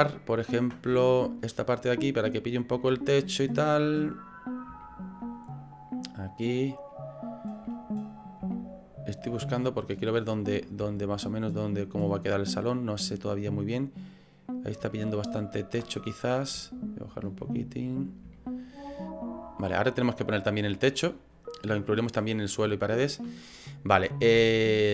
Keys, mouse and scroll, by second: 1.0 shift+middle click, 2.2 middle click, 2.9 shift+middle click, 3.8 middle click, 4.9 shift+middle click, 7.7 middle click, 8.4 middle click, 8.7 shift+middle click, 9.6 ctrl+middle click, 10.9 shift+middle click, 14.9 ctrl+middle click, 15.9 middle click, 16.7 shift+middle click, 17.4 middle click, 18.4 shift+middle click, 18.9 middle click, 19.2 middle click.